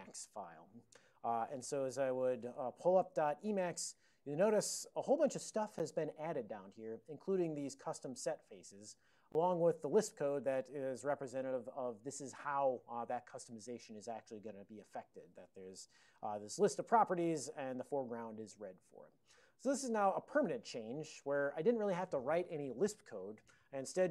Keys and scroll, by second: 2.3-3.1 typing, 3.9 alt+>, 5.9 ctrl+p, 6.5 ctrl+p, 6.6 ctrl+p, 7.0 ctrl+p, 7.0 ctrl+n, 9.0 ctrl+n, 9.5 ctrl+n, 9.7 ctrl+n, 9.9 ctrl+n, 10.0 ctrl+n, 10.1 ctrl+;, 10.9 alt+f, 11.1 alt+f, 11.3 alt+f, 11.6 alt+f, 15.6 alt+b, 17.1 alt+f, 17.4 alt+f.